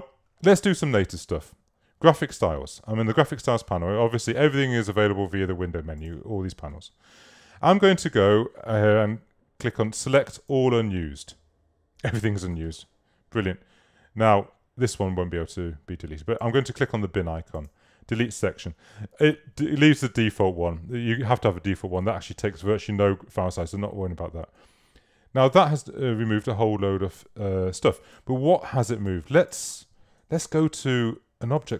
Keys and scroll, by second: 28.2 super+z, 28.9 super+space, 29.4 space.